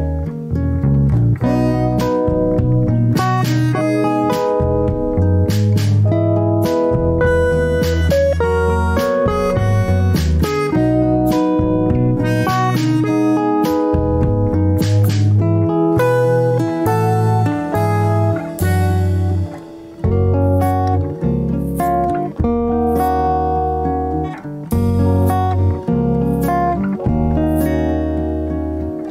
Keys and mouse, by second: 0.5 ctrl+r, 5.1-5.5 middle drag, 5.9 shift+middle drag, 8.0 ctrl+r, 10.3-10.7 shift+middle drag, 11.7 ctrl+r, 15.6 middle click, 16.5 shift+middle click, 17.6 ctrl+r, 23.3 shift+middle click, 25.0 ctrl+r.